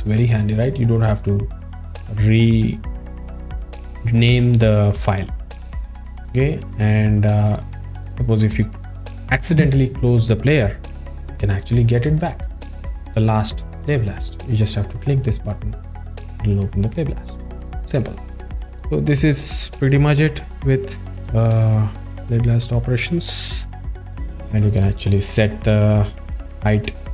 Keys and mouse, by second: 7.5 click, 24.8 click, 26.2-27.1 drag.